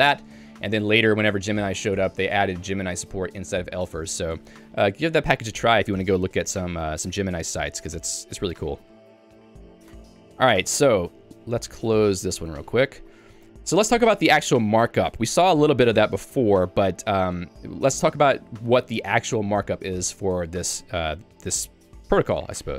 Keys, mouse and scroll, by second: 7.8 j, 8.7 k, 9.5 j, 10.0 Tab, 13.8 k, 14.6 j.